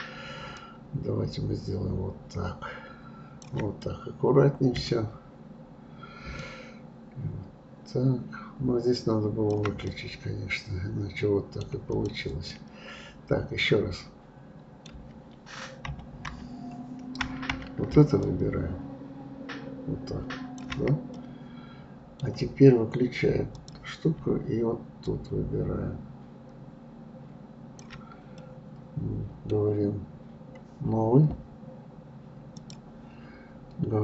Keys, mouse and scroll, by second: 0.6-3.6 shift+drag, 3.8-6.4 middle drag, 6.4-9.4 shift+drag, 9.8-11.9 middle drag, 11.9 click, 12.5-15.8 middle drag, 15.8 KP_Decimal, 16.2 KP_3, 18.2-21.1 shift+drag, 21.1-23.5 middle drag, 23.5-28.1 drag, 28.3-31.4 middle drag, 32.6 click.